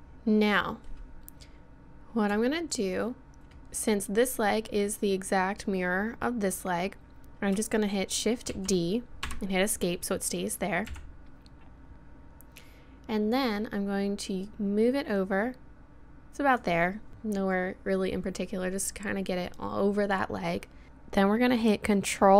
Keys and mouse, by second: 8.5 shift+d, 10.9 KP_1, 14.5-16.4 middle drag.